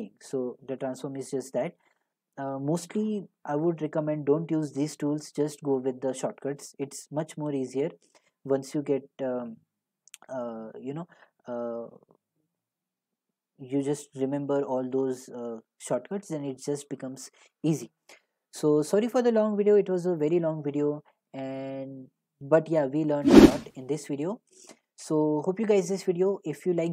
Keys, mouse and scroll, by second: 5.4 click, 19.5 click, 19.6 click, 23.0 click, 23.1 click.